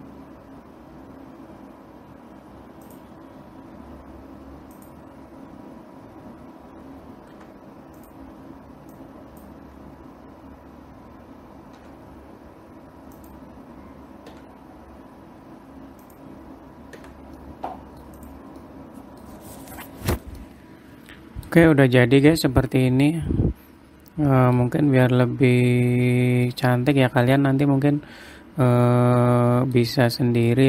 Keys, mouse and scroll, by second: 0.3-2.0 scroll down 2, 3.4 click, 5.3 click, 6.4-7.2 scroll down 2, 7.2-7.9 scroll up 1, 7.9 u, 9.5 click, 10.4 scroll up 5, 12.3 s, 14.9 g, 17.6 Tab, 17.9 middle click, 18.7 click, 19.2 middle click, 19.8-20.5 scroll up 2, 20.5-20.9 scroll down 5, 20.9 middle click, 22.1-22.5 scroll up 2, 22.7 middle click, 25.2-25.6 scroll up 2, 26.7-27.0 scroll down 3, 27.0 middle click, 27.6 scroll up 1, 27.8 click, 29.4 middle click.